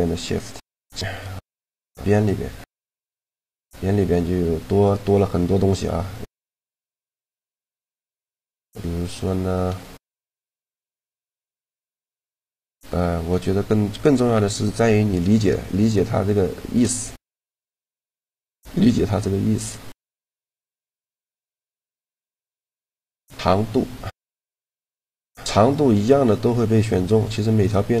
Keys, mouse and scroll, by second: 1.7-3.4 drag, 3.0 shift+g, 7.0-8.5 right drag, 8.5-10.5 middle drag, 10.9 shift+g, 14.5-16.2 middle drag, 16.2 shift+g, 20.2 middle click, 21.2 shift+g, 25.0-26.8 drag, 27.0-28.0 right drag.